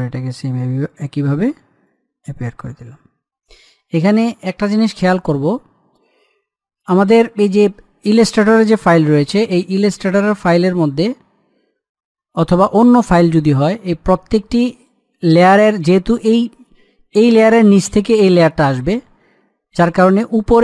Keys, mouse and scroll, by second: 4.4-6.8 middle drag, 15.4 click.